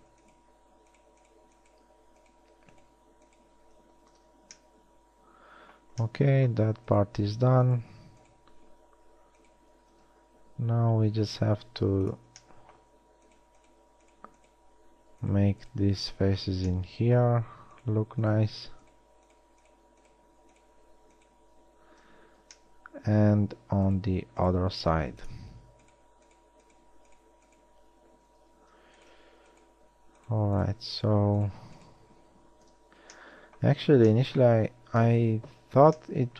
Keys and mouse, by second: 0.2-4.3 middle drag, 4.3 f, 10.1 shift+x, 12.9-16.7 drag, 16.7 middle drag, 16.7 f, 16.8 drag, 16.9 middle click, 22.2 f, 25.0 x, 29.3 f, 32.9 f, 33.9 a, 35.3 KP_1.